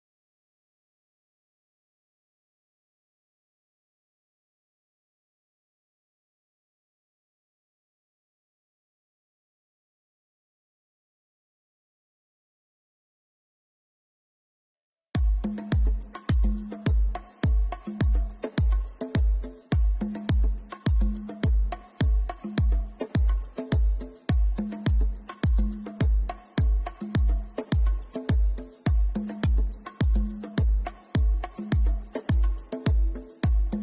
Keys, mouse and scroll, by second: 0.1 alt+shift+click, 0.1 shift+middle click, 0.1 scroll up 5, 3.4 middle click, 12.5 middle click, 13.5 Tab, 14.5 middle click, 14.9-15.2 scroll up 2, 15.8 Tab, 15.8 middle click, 15.8 scroll up 2, 16.3 Tab, 17.9 click, 18.4 shift+middle click, 19.2 middle click, 20.3 ctrl+shift+click, 22.4 click, 23.5 ctrl+shift+click, 24.1 right click, 25.8 middle click, 26.2 scroll down 3, 27.1-28.2 scroll down 2, 28.2 a, 29.1 u, 29.4 u, 33.0-33.5 scroll up 7.